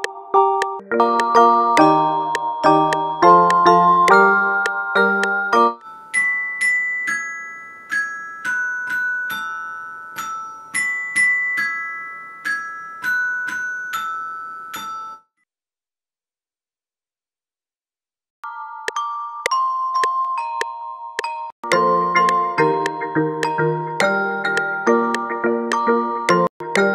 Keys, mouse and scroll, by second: 2.1 click.